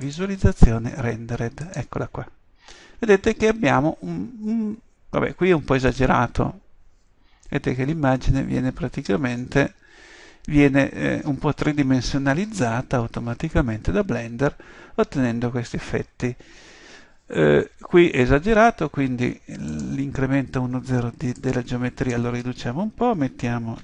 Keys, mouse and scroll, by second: 0.1 click, 1.8 click, 8.5-11.6 middle drag, 19.8-23.8 drag.